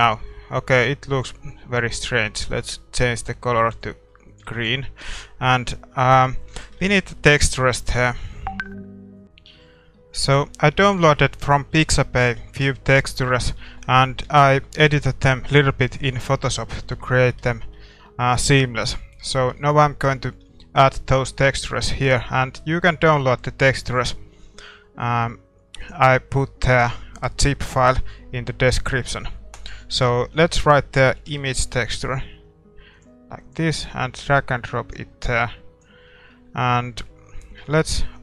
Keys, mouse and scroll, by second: 1.2-3.1 drag, 4.4-6.0 drag, 4.5 ctrl+s, 5.3-6.2 scroll down 1, 6.2-38.2 middle drag, 6.7 shift+z.